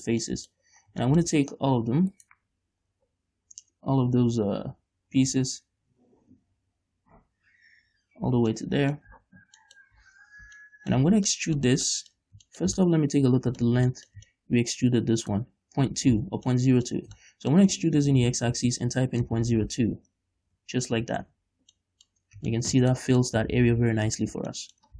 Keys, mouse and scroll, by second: 0.2 scroll down 1, 0.5 middle click, 1.0 scroll down 1, 1.3-2.4 shift+middle drag, 2.4 right click, 3.2 l, 8.8 middle click, 9.3 z, 9.9 middle click, 10.2 z, 10.4-10.8 scroll up 2, 10.8 shift+middle click, 11.7-15.5 middle drag, 15.5 right click, 16.4 ctrl+z, 16.8 shift+middle click, 18.2 e, 20.8 Return, 21.4 Tab, 21.8 scroll down 1, 22.0 middle click, 22.4 scroll up 1, 22.8 shift+middle click, 23.4-24.6 middle drag, 24.2 scroll down 1, 24.6 a.